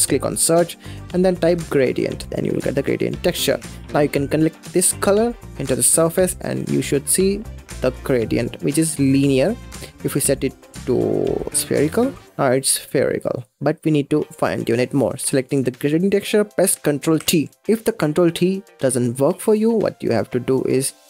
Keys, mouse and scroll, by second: 3.9 click, 6.8 scroll up 3, 7.2-9.1 middle drag, 9.1-11.5 drag, 12.9-15.2 middle drag, 15.2 click, 17.3 ctrl+t, 17.6-19.2 middle drag, 19.2 click.